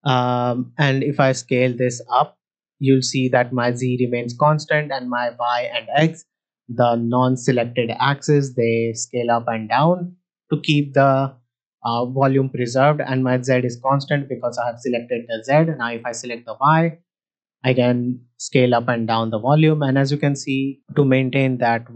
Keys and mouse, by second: 0.8-6.0 drag, 7.9-10.4 drag, 12.7 middle drag, 15.8 click, 16.6 middle drag, 17.6-20.7 drag.